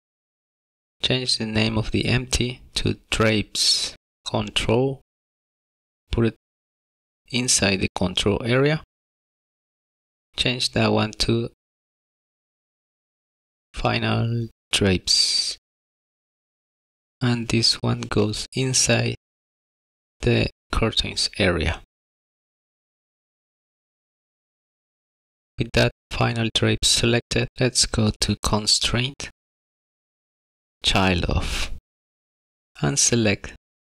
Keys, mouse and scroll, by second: 1.2 click, 1.4 click, 9.0 click, 12.2 click, 15.1 BackSpace, 15.2 BackSpace, 17.3 click, 23.3 middle click, 28.4 click, 28.7 click, 28.9 middle click, 29.1 shift+middle click, 30.2 click, 31.1 click.